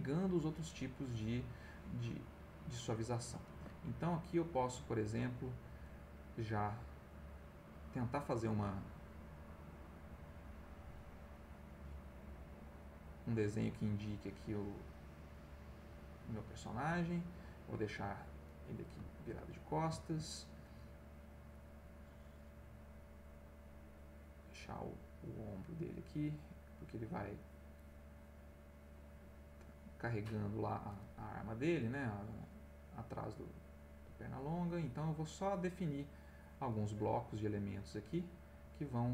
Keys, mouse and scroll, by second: 2.2 click, 3.5 ctrl+z, 4.0 ctrl+click, 5.2 click, 6.4 click, 8.8 click, 9.6 click, 10.2 click, 10.6 click, 11.3 click, 11.9 click, 13.0 click, 14.0-15.2 drag, 15.2 click, 16.1 click, 18.0 click, 18.6 middle click, 19.6 ctrl+middle click, 22.7 click, 23.1-25.0 drag, 25.1-26.5 drag, 26.6 click, 28.8 click, 29.6 click, 30.7 click, 31.6 click, 32.6 click, 34.2-36.7 drag, 37.6 click.